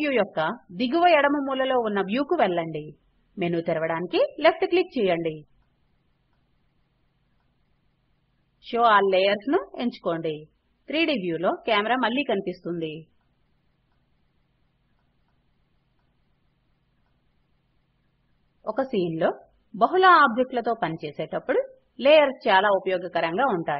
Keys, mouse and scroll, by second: 3.5 click.